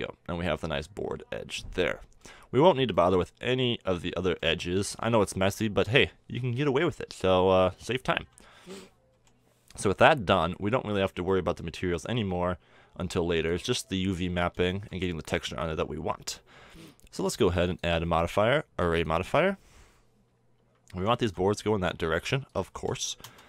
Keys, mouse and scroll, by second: 0.1-2.6 middle drag, 2.9-4.3 middle drag, 5.5-8.2 middle drag, 8.2 KP_7, 9.1 t, 13.2-14.8 drag, 14.8-15.8 middle drag, 17.0 middle click, 17.2-20.1 drag, 22.5-23.4 drag.